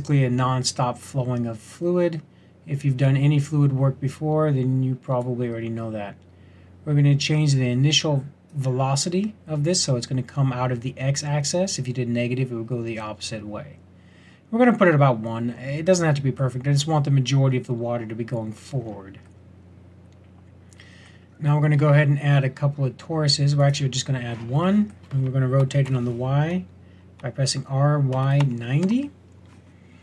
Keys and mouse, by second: 15.8 middle click, 18.8 middle click, 21.8 shift+a, 25.6 r.